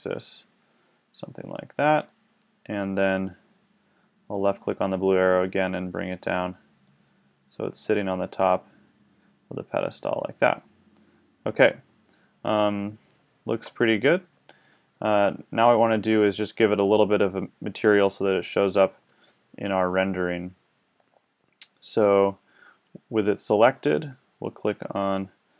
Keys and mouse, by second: 2.0-4.3 drag, 6.2-7.4 right drag, 7.4-8.2 middle drag, 8.2-8.9 drag, 8.9 middle drag, 9.0 drag, 12.4-15.9 middle drag, 24.8-25.5 drag.